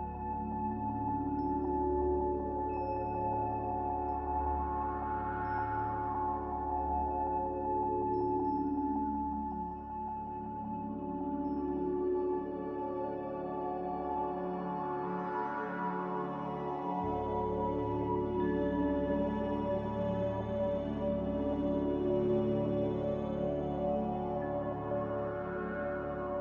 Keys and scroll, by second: 0.3 z, 5.5 z, 6.5-6.9 typing, 6.9 Return, 12.7-13.7 typing, 19.8 z.